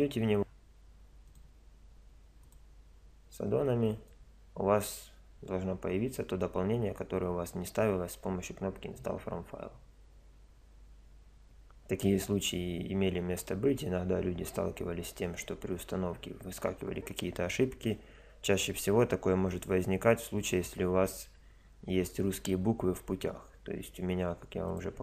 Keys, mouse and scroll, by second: 1.2-3.1 drag.